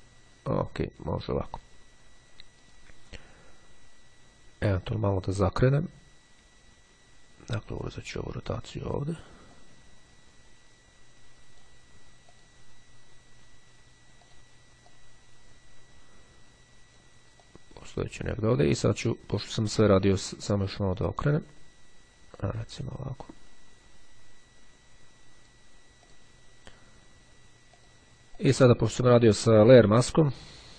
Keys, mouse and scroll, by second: 7.9 click, 9.7-12.2 drag, 12.4 click, 14.3 click, 22.4 click, 23.3-26.1 drag, 27.7-30.7 drag.